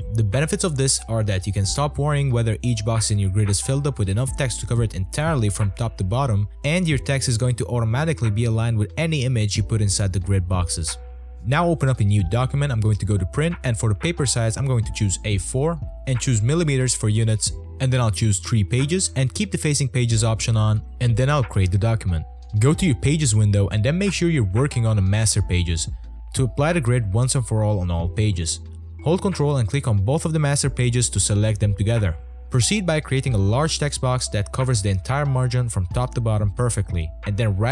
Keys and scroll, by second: 7.7 space, 19.4 3, 23.9 space, 24.8 space, 25.0 space, 25.2 space, 30.6 t.